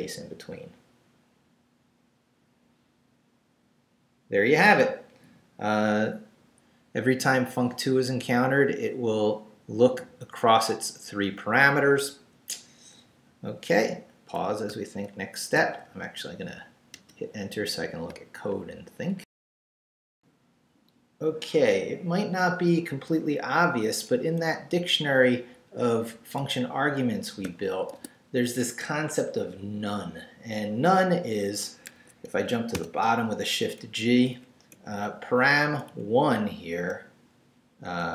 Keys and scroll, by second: 16.9 Return, 19.2 alt+shift+super+z, 23.9 Up, 24.4 Left, 26.4 Left, 27.4 o, 27.9 Tab, 31.9 Escape, 32.4 shift+Escape, 32.7 shift+g, 33.8 shift+Up, 34.7 Right.